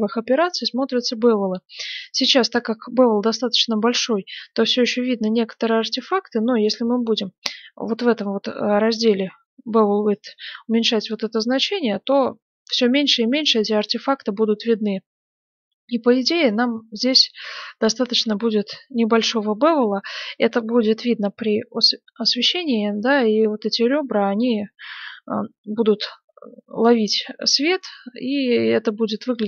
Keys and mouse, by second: 0.3-3.6 middle drag, 19.3-25.2 middle drag, 25.2 middle click, 28.1-29.4 middle drag.